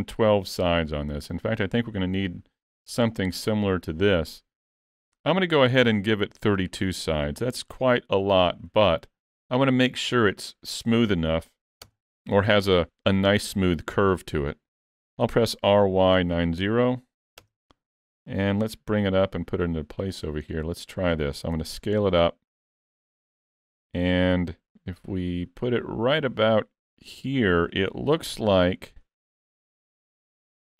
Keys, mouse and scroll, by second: 6.6 click, 15.4 r, 19.0 g, 20.5-20.8 scroll up 3, 20.8 shift+middle click, 21.5 s, 24.6 g, 28.3 s, 29.8 scroll up 1, 30.0 shift+middle click.